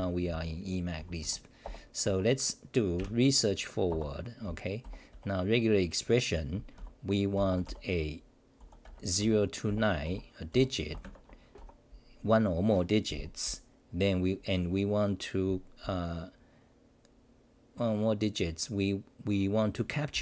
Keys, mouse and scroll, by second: 2.9 t.